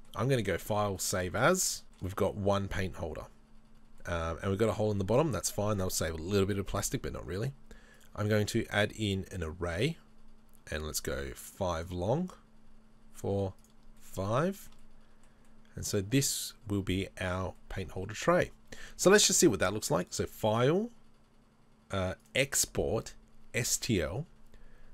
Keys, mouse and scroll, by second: 1.1 click, 1.8 middle click, 1.9 shift+middle click, 2.1 middle click, 9.5-14.1 drag, 14.1 middle click, 14.6 middle click, 14.6 shift+middle click, 14.9 middle click, 15.5-23.8 middle drag.